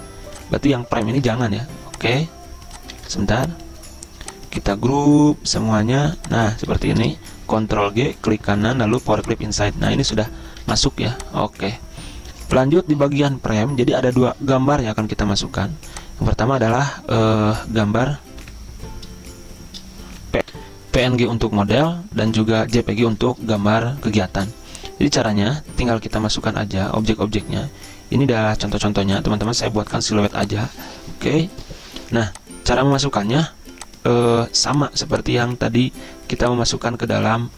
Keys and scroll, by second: 1.5 ctrl+z, 6.8 ctrl+z, 7.6 ctrl+g, 10.8 ctrl+z, 18.5 F11, 20.5 F10, 20.6 ctrl+v, 20.7 F10.